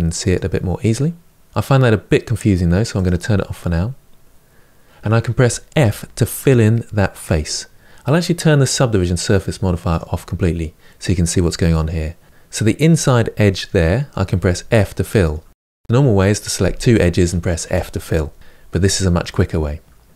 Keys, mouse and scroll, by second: 0.1 click, 2.7 click, 5.5 f, 9.6 click, 11.0-14.1 middle drag, 14.1 f, 14.8 middle click, 15.7 click, 17.4 f.